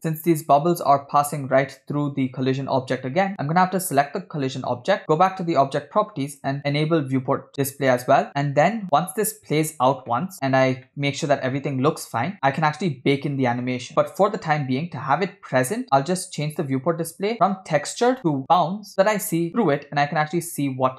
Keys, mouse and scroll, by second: 2.8 space, 3.9 click, 5.0 scroll down 3, 6.5 click, 8.2 middle click, 10.3 middle click, 11.1-12.2 middle drag, 12.3 space, 13.9-14.7 scroll down 4, 16.5 click, 17.0-17.6 scroll down 5, 18.1-18.9 drag, 18.9-19.4 middle drag, 20.0-20.9 drag.